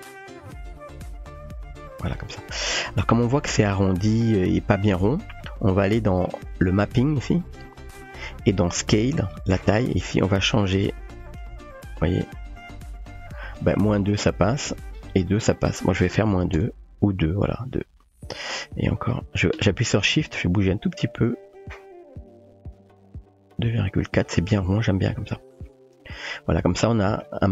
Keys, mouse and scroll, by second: 0.5-2.2 drag, 5.4-6.3 middle drag, 6.7-7.6 drag, 7.6 typing, 8.6 middle click, 10.8-13.6 drag, 14.4-17.0 drag, 19.2-24.2 shift+drag, 27.0 shift+middle click.